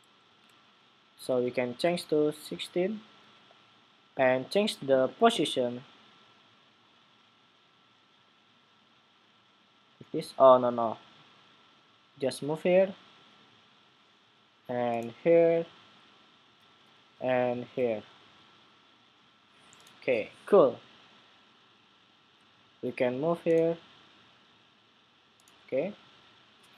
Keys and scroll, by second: 0.1 super+v.